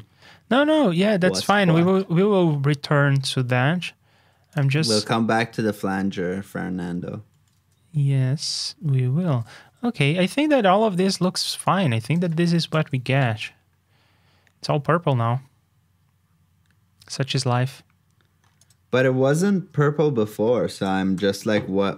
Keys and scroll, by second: 1.8 super+c, 4.8 super+v, 9.3 shift+super+k, 12.4 super+c, 12.7 super+j, 21.1 super+j.